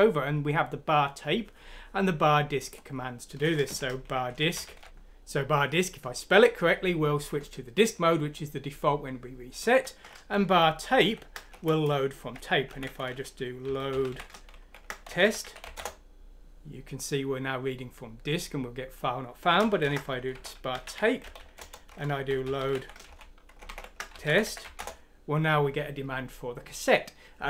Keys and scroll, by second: 3.6-5.4 typing, 10.9 p, 12.6 ctrl+F9, 13.5 ctrl+i, 13.6-16.0 typing, 19.5-25.0 typing, 26.1 typing.